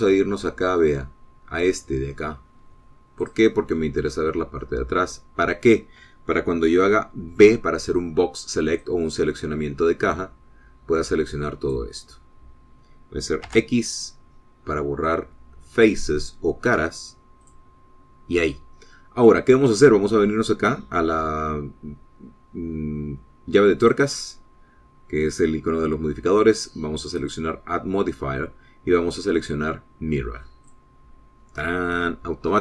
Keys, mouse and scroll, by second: 4.1 click, 5.4-6.5 middle drag, 8.3 b, 9.7-12.8 drag, 14.4 x, 18.3 click, 24.7 click, 28.1 click, 28.4-29.4 middle drag, 31.5 click.